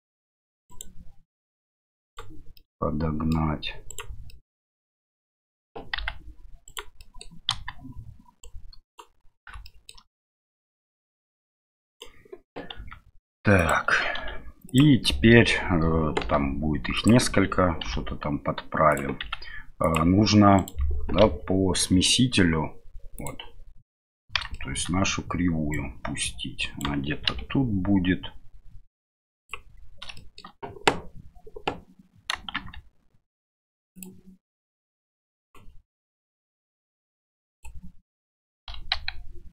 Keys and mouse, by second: 1.4 right click, 2.6 middle click, 3.8 right click, 4.3-5.3 middle drag, 5.9 g, 6.9 middle click, 7.5 KP_1, 8.4-9.5 right drag, 9.7 middle click, 11.2 right click, 12.7 s, 20.5 right click, 21.2 KP_Divide, 23.1 click, 24.5 shift+middle click, 25.7-27.2 right drag, 27.2 r, 30.1 shift+middle click, 32.5 shift+s, 35.5 click, 36.4-37.6 drag.